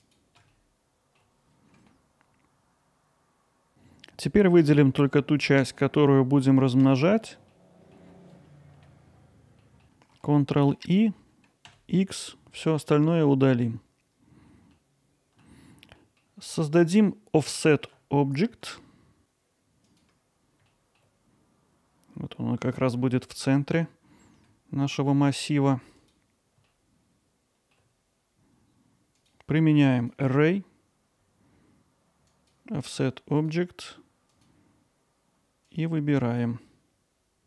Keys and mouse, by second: 0.2-1.7 drag, 1.7 middle click, 1.8 alt+middle click, 3.2 middle click, 3.4 alt+middle click, 7.5 alt+middle click, 8.3 middle click, 8.5 click, 9.1 click, 13.2 middle click, 14.7 alt+middle click, 16.0 middle click, 16.8 middle click, 17.6 middle click, 20.7 middle click, 23.2 alt+middle click, 26.7-27.7 middle drag, 29.2-30.1 drag, 32.3 click, 33.4 click, 34.3 click.